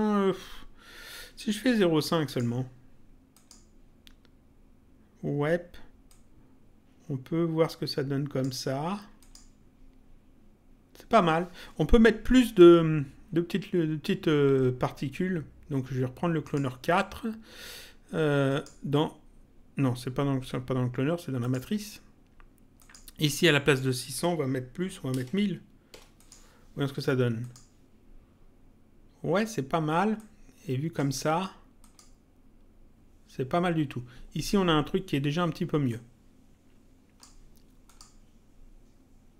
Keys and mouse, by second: 2.2 click, 3.3 click, 6.0 click, 9.2 click, 16.4 click, 18.4 click, 21.3 click, 22.7 click, 26.1 click, 27.3 click, 30.1 click, 31.7 click, 35.9 click, 37.8 click.